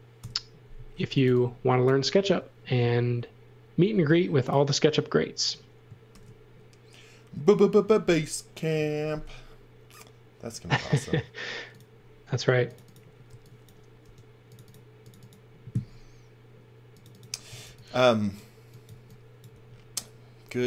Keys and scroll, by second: 0.2 Delete, 0.8-2.2 typing, 3.9 b, 6.1 shift+5, 13.3 x, 14.0 b, 17.5 v, 18.9 x, 19.5 v.